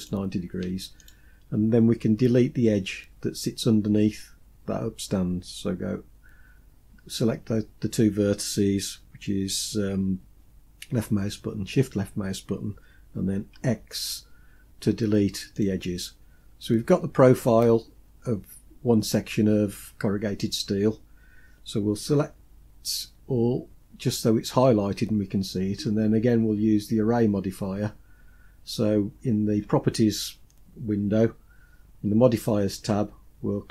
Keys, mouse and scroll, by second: 0.7-1.2 shift+drag, 13.2 x, 19.4 scroll down 2, 22.7 a.